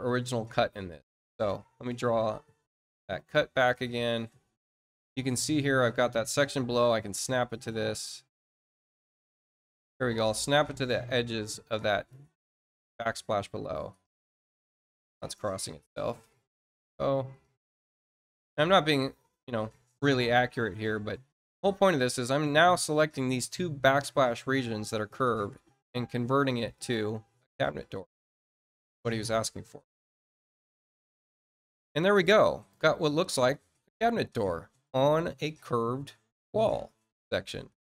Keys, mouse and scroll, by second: 0.3 click, 1.8 click, 2.8 click, 5.6 click, 7.7-9.3 drag, 11.2 click, 13.1 click, 14.4 click, 17.0 click, 20.0 click, 21.5 shift+click, 25.1 click, 26.7 click, 28.6 click, 29.4 click, 31.3-32.6 drag, 32.9 middle click, 33.4-37.8 drag.